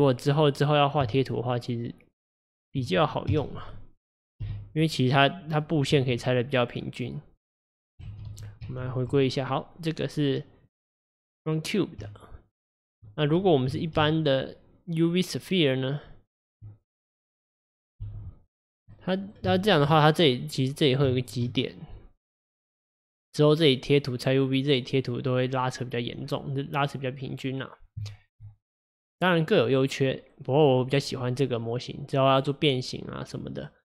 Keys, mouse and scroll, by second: 0.6 click, 1.1 Tab, 3.4 KP_Divide, 4.5 g, 5.1-5.7 right drag, 5.7 drag, 6.0 Tab, 7.9 click, 8.2 ctrl+z, 8.4 ctrl+z, 8.7 ctrl+z, 9.3 click, 10.8-12.1 middle drag, 12.1 Tab, 14.1 shift+a, 18.1 g, 19.0-20.8 middle drag, 20.8-21.2 scroll up 1, 21.2-24.2 shift+middle drag, 26.3-26.9 scroll down 3, 26.9-31.0 middle drag, 31.0 click.